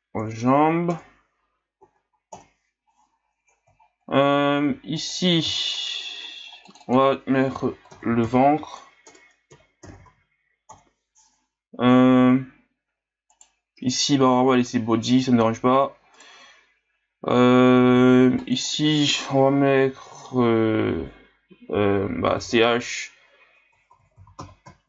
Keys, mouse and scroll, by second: 1.9 Right, 2.0 Right, 3.8 scroll down 4, 4.2-4.9 scroll up 1, 5.0 right click, 6.6-9.8 drag, 12.4-13.3 scroll up 2, 13.3 right click, 16.2 right click, 18.4 click, 18.6-21.6 drag, 24.4 s.